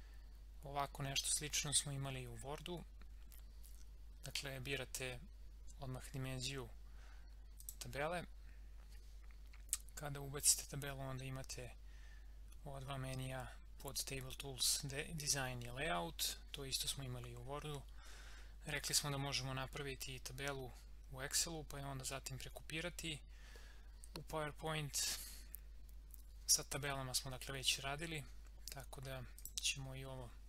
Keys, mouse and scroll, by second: 7.5 click, 29.4 click.